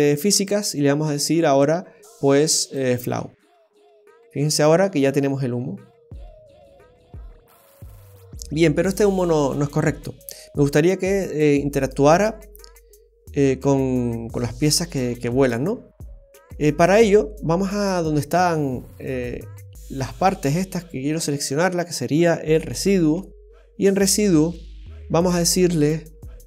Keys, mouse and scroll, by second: 0.3 click, 3.9 space, 18.2 space, 22.6 click, 24.0-24.5 scroll down 1.